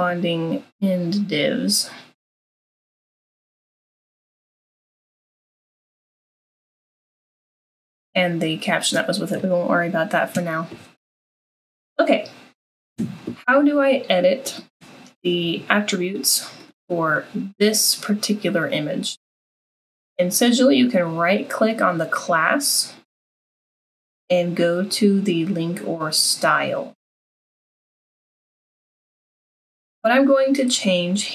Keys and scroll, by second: 6.9 BackSpace, 9.0 BackSpace.